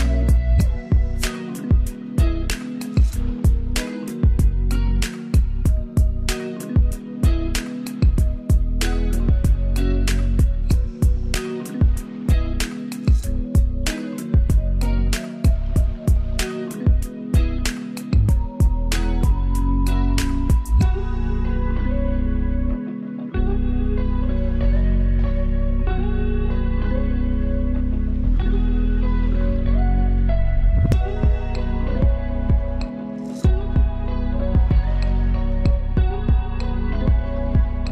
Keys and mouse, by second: 0.0 =, 4.1-8.4 drag, 9.8 ctrl+[, 11.9-15.5 drag, 16.9 ctrl+click, 17.1 ctrl+space, 17.7-26.7 ctrl+alt+drag, 31.9 ctrl+click, 32.4 ctrl+shift+], 34.1 click, 36.0 Down.